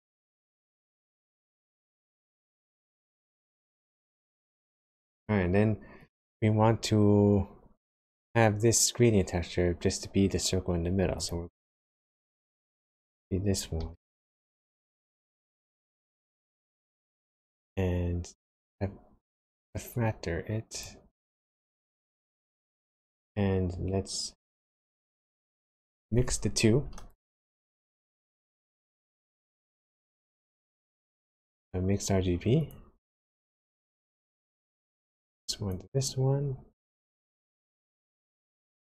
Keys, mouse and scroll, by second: 1.5 click, 1.9-3.0 scroll down 5, 3.0 middle click, 6.0 click, 11.2 click, 12.5 click, 13.7 shift+d, 19.5 click, 21.4 click, 28.2 click, 28.5 shift+a, 34.6 click, 36.8 click.